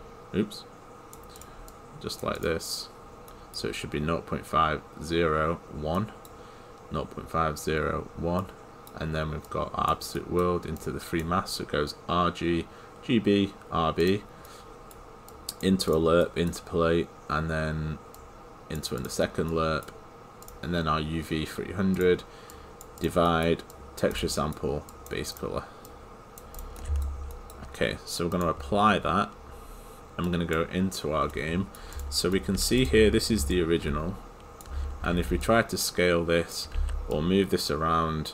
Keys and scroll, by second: 33.4 Return.